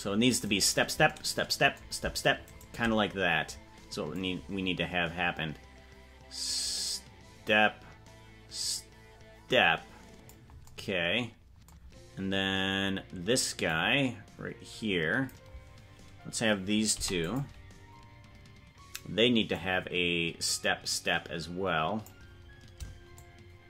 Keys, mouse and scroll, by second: 0.7-1.0 right drag, 2.8 shift+right click, 4.2-10.4 drag, 13.8-15.4 drag, 19.6-22.1 drag, 23.1 shift+click.